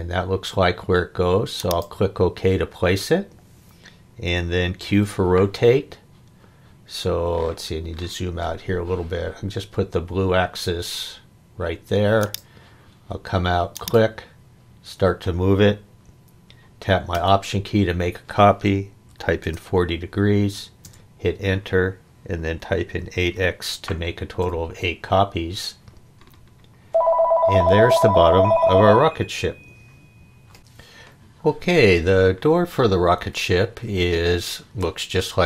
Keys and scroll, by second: 4.8 q, 19.1 4, 19.4 0, 20.8 Return, 22.9 8, 23.1 x, 24.4 Return.